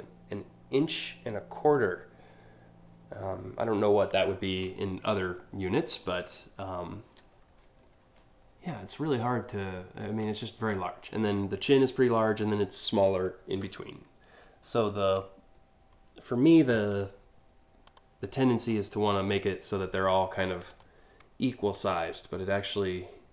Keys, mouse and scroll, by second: 17.5 click, 19.0 click, 20.3 click, 21.4 shift+click, 22.2-23.3 drag.